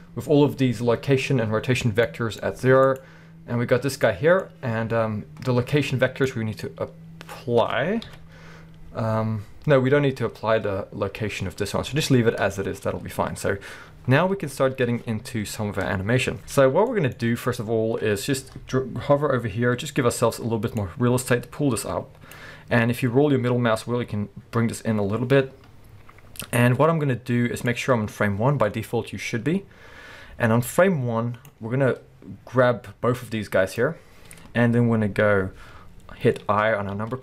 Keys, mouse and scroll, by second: 2.1 middle click, 2.5-2.9 scroll up 2, 2.9-4.1 drag, 4.1-20.8 middle drag, 8.1 KP_1, 11.9 alt+a, 12.1-12.6 scroll down 2, 12.8-14.2 scroll up 2, 14.2-16.9 scroll down 2, 17.3-18.7 scroll up 2, 18.7-20.8 scroll up 1, 20.8-34.7 drag, 23.3-23.6 scroll down 1, 37.0 i.